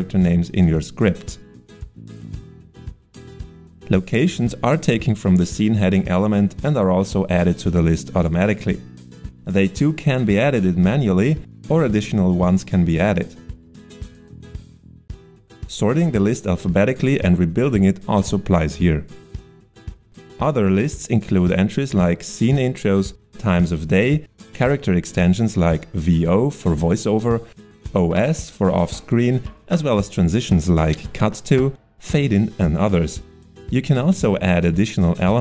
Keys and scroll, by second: 12.1 shift+Left, 12.6-13.8 typing.